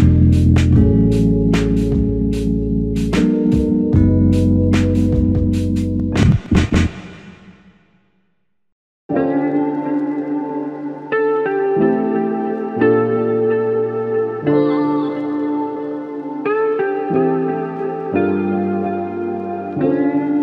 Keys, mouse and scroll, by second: 0.6 alt+click, 1.6-2.0 typing, 5.2 typing, 12.1 double click, 18.8 alt+m.